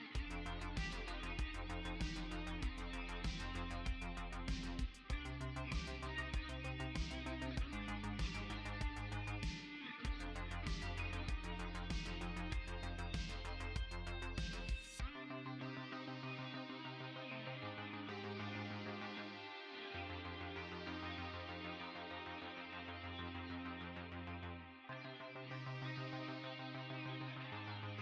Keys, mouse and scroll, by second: 1.6 Escape, 3.0 middle click, 7.4 click, 9.0 Tab, 11.8 right click, 14.1 ctrl+s, 16.4 click, 23.4 click.